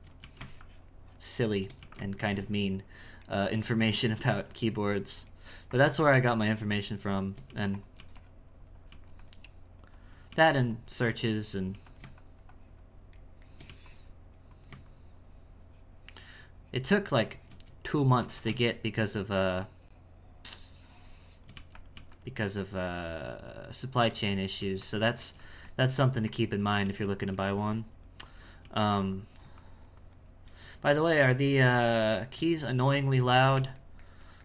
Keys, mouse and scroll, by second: 0.6 shift+click, 1.4 shift+middle click, 2.2 shift+click, 3.1 shift+middle click, 3.5-5.4 shift+drag, 5.4 shift+middle click, 5.7 shift+click, 6.1 shift+middle click, 6.4 shift+click, 6.9 shift+middle click, 7.4 f, 8.0 f, 9.5 click, 10.3 f, 10.7-11.7 drag, 11.7 f, 12.2-13.2 shift+drag, 13.2 shift+middle click, 13.7 f, 14.1-18.0 drag, 18.0 shift+middle click, 18.3 f, 18.7-21.5 shift+drag, 21.5 f, 21.9 f, 22.6-24.6 drag, 24.6 f, 25.2 f, 25.6-26.8 drag, 26.8 f, 27.3 f, 27.7 click, 28.6 f, 29.1-30.5 drag, 30.5-33.3 shift+middle drag, 33.8-34.4 shift+middle drag.